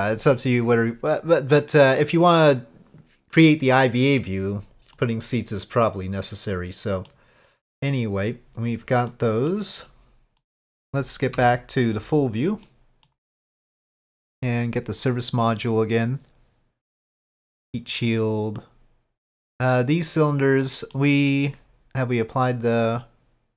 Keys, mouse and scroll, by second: 1.9 click, 3.3-4.2 middle drag, 4.9-7.1 middle drag, 9.1-9.5 middle drag, 10.4 middle drag, 11.3 KP_Divide, 12.6-13.1 middle drag, 13.8-14.4 drag, 15.0 click, 17.2 click, 19.9 click, 20.6 middle click, 22.3 click.